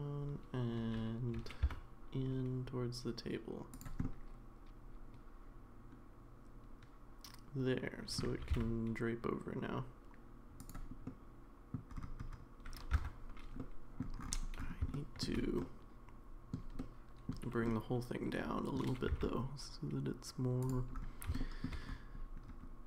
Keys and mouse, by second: 1.3 g, 4.0-8.2 middle drag, 8.4 g, 11.2 middle click, 12.9 Tab, 13.6 middle click, 14.9 middle click, 15.6 middle click, 16.8 middle click, 17.6-18.8 middle drag, 19.1 g, 21.4 middle drag.